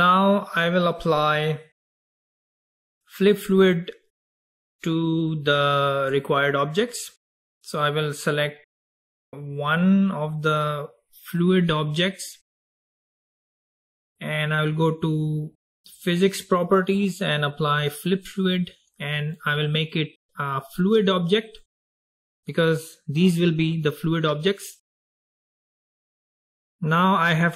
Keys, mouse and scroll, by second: 4.4-5.5 scroll up 2, 5.5-8.6 scroll down 2, 9.7 click, 16.4 click, 18.1-22.4 drag, 26.1 click.